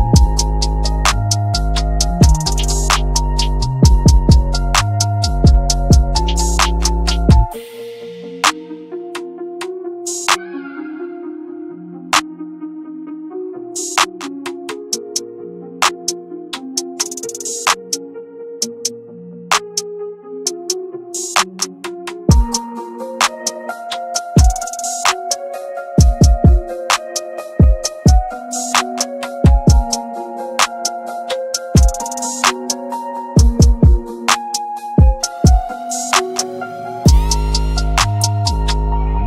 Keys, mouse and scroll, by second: 0.3-1.7 drag, 1.7 ctrl+space, 2.1-2.9 scroll up 1, 2.9-3.4 scroll down 1, 3.4 click, 4.0-4.4 scroll up 1, 4.5 ctrl+space, 6.0-6.3 scroll up 1, 6.3-7.7 drag, 7.7 shift+right click, 8.1-8.9 scroll down 1, 9.3 ctrl+r, 11.0 ctrl+x, 12.2-12.6 scroll down 1, 12.6-13.2 scroll up 1, 13.2-15.0 drag, 16.6 right click, 17.9 click, 21.6 ctrl+space, 22.4-25.4 drag, 25.4 ctrl+g, 26.4 shift+click, 27.4-27.7 scroll down 1, 27.7-31.4 drag, 31.4 scroll up 1, 31.7 click, 31.7-34.1 drag, 34.1-34.4 scroll down 1, 34.4 scroll up 1, 34.6-39.2 drag.